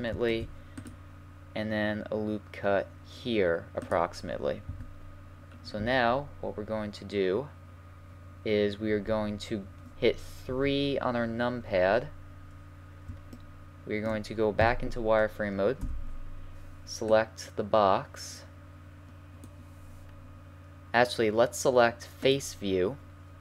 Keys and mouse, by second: 0.3 ctrl+r, 4.7 a, 8.8 KP_1, 10.5 KP_3, 13.5 middle click, 13.9 middle click, 14.6 z, 15.8 b, 22.2-23.4 drag.